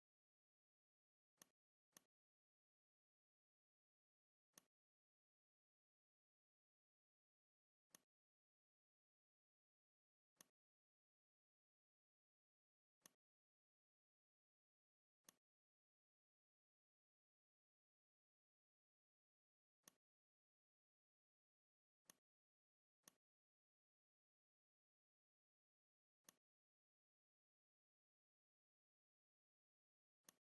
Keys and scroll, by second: 0.6 a, 5.8 m, 9.9 a, 12.4 shift+c, 14.7 a, 21.8 v, 30.2 r.